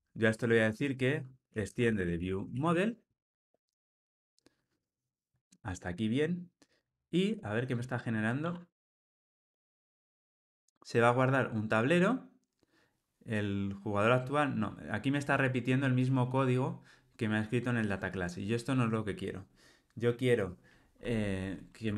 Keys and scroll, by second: 3.1 Return.